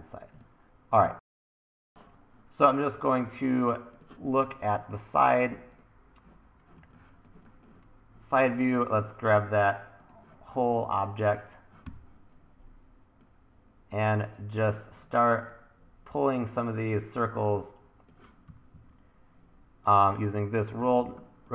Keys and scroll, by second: 1.5 1, 6.8 1, 11.9 r, 18.4 e, 18.7 w, 21.0 t.